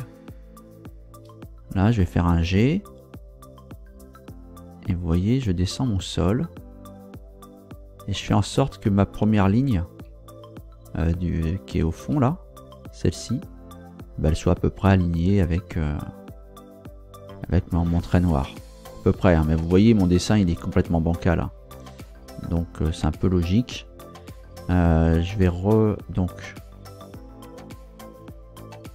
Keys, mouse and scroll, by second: 1.1 Return, 2.3 g, 3.2 Up, 8.2 Down, 10.3 Down, 10.9 Up, 12.0 Return, 17.7-18.1 scroll up 2, 21.2 scroll down 1, 21.7-22.0 scroll down 1, 22.8-24.2 scroll down 2.